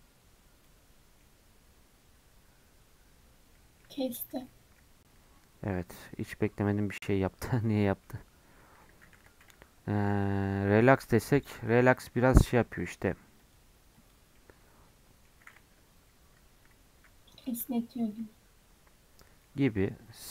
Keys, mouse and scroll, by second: 1.2-4.2 middle drag, 4.2 ctrl+z, 4.5 middle click, 5.1-5.7 scroll up 1, 5.7 scroll up 1, 5.8-9.1 middle drag, 9.1 3, 9.4-14.3 right drag, 14.3-15.5 middle drag, 15.5 Tab, 16.3 Tab, 18.1-20.1 right drag, 20.1 middle click.